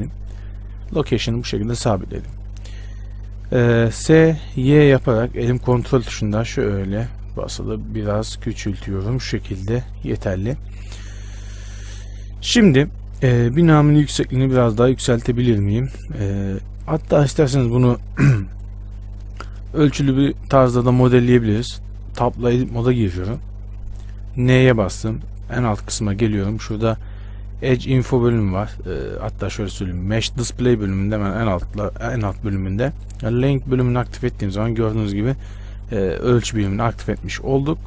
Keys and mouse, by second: 0.9 s, 4.2 s, 21.3 Tab, 24.7 n, 34.2-37.4 drag, 34.2 n.